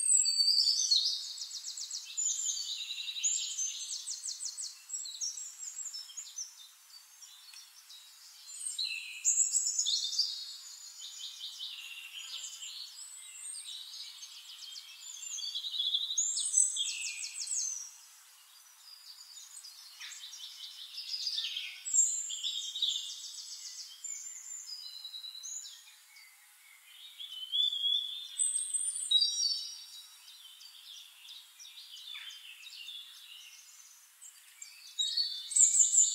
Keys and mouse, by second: 4.6 click, 5.2 shift+click, 6.2 click, 6.8 click, 7.6 shift+-, 8.2 middle click, 9.0-10.2 drag, 10.6 click, 11.4 middle click, 12.2 ctrl+d, 12.4-13.4 ctrl+drag, 13.5 middle click, 14.8 click, 15.5-17.6 drag, 19.8 click, 20.2 shift+click, 21.3 drag, 22.5 click, 24.0 click, 24.7-28.0 drag, 28.6 drag, 29.0 shift+drag, 29.7-30.8 drag, 31.4 shift+-, 31.9 click, 33.0-33.8 drag, 33.9 click, 34.6 shift+-, 35.0 ctrl+shift+click, 35.4 ctrl+d, 35.7-36.1 ctrl+drag.